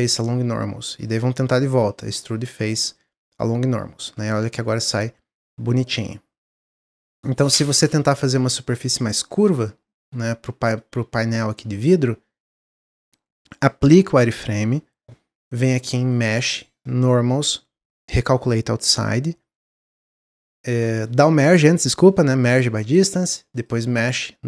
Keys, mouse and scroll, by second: 1.0-4.0 drag, 7.4-9.4 middle drag, 9.4-9.9 scroll down 1, 9.9 middle click, 10.0-10.5 scroll down 1, 10.5-13.7 middle drag, 15.9-19.0 drag, 20.5-23.5 middle drag, 23.5-24.4 drag.